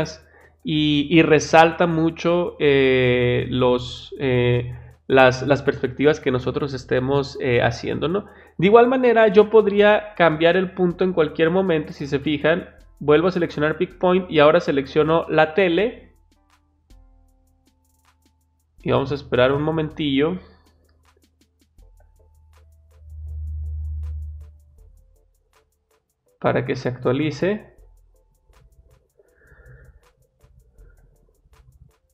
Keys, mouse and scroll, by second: 13.0 click, 15.2 click.